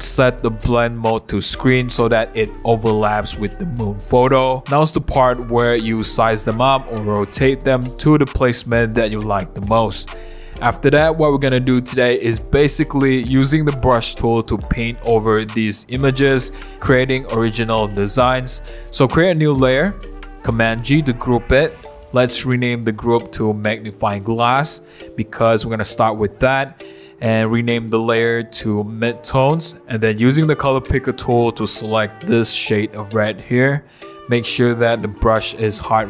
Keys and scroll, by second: 2.7 super+t, 8.1 Return, 10.7 super+t, 15.0 Return, 20.6 super+g, 22.4-26.0 typing, 27.6-29.9 typing, 33.1 b.